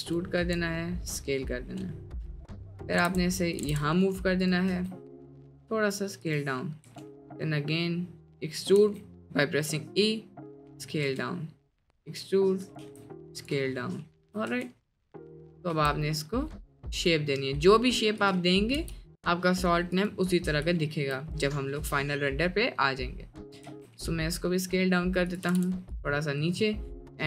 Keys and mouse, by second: 0.4 e, 3.6 g, 4.7 s, 6.8 e, 8.8 s, 11.1 e, 12.9 s, 14.0 shift+click, 14.5 e, 15.7 s, 18.8 g, 20.8 shift+click, 21.8 e, 23.7 s, 25.5 g, 26.2 middle click.